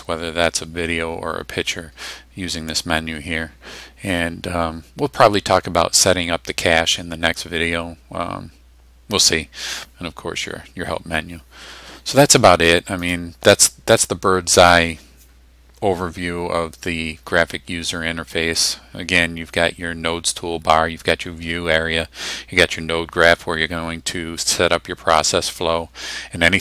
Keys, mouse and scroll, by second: 13.1 click.